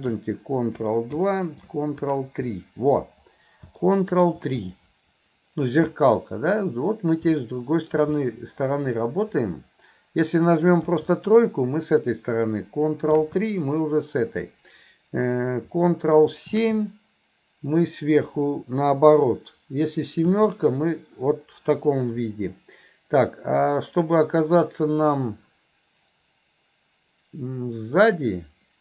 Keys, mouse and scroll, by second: 3.8-4.2 middle drag, 7.5-7.8 middle drag.